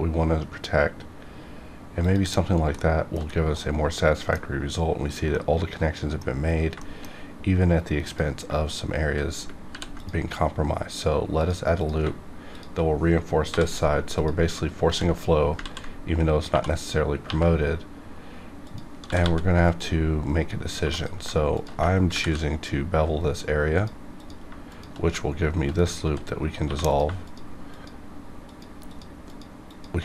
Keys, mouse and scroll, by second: 2.0 click, 2.7 shift+middle click, 3.2 shift+scroll down 2, 3.5-5.3 middle drag, 5.3 middle click, 6.4 scroll up 1, 6.7 shift+middle click, 7.0 scroll up 1, 8.0 click, 9.7 ctrl+r, 10.7 ctrl+click, 11.3 click, 12.5 shift+click, 13.4 j, 14.1 click, 14.8 ctrl+x, 15.6 ctrl+z, 16.4 2, 16.8 click, 17.2 1, 18.6 click, 18.9 g, 19.1 g, 19.6 click, 20.7 2, 20.8 click, 20.9 click, 21.5 shift+click, 22.1 ctrl+b, 23.7 click, 24.2 click, 24.7 shift+click, 25.9 ctrl+x, 26.6 1, 26.8 click, 27.2 shift+click.